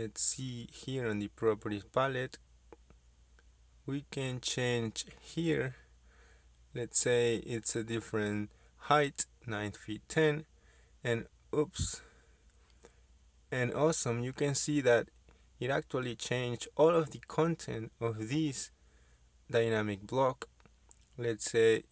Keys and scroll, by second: 9.7 BackSpace, 10.0 BackSpace, 10.8 9, 12.3 Return, 15.7 Escape.